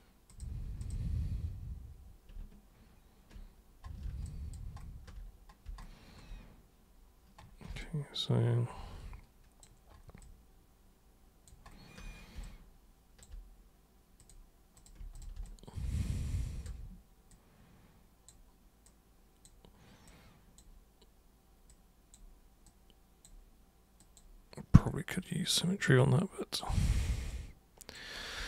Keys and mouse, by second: 0.3 super+click, 0.7 shift+super+click, 4.3 alt+super+click, 7.8-9.6 alt+super+drag, 10.2-11.4 alt+super+drag, 12.4-13.2 alt+super+drag, 14.2 super+click, 14.7 super+click, 15.1 shift+super+click, 15.4-16.6 alt+super+drag, 17.3-18.3 super+drag, 18.8 super+click, 20.1 super+click, 21.7 super+click, 22.6 super+click, 24.0 super+click, 24.7 super+click, 26.0 super+click, 27.3 super+click.